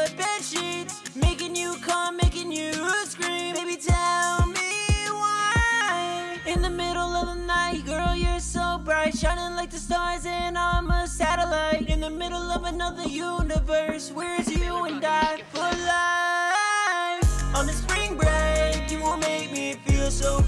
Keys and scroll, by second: 16.3 ctrl+shift+-, 18.4 ctrl+Page_Up, 18.5 ctrl+Page_Up, 18.7 ctrl+Page_Up, 20.1 F2.